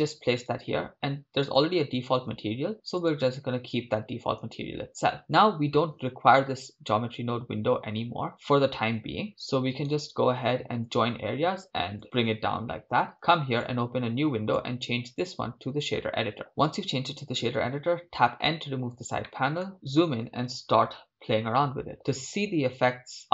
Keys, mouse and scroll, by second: 2.2-4.9 drag, 10.3-12.0 right drag, 13.6-14.7 drag, 15.2 click, 17.7 n, 19.2 scroll up 5.